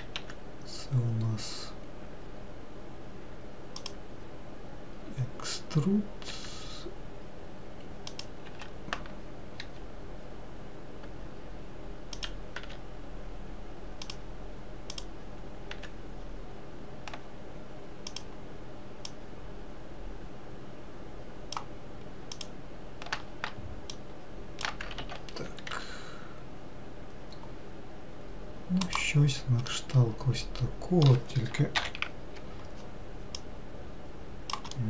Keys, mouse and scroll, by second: 0.7 e, 6.8 e, 9.1 s, 13.1 e, 15.5 click, 16.3 e, 19.8 click, 23.0 click, 24.6 shift+click, 25.5 ctrl+z, 26.3 e, 30.2-32.3 middle drag, 32.3 ctrl+l, 34.1 click.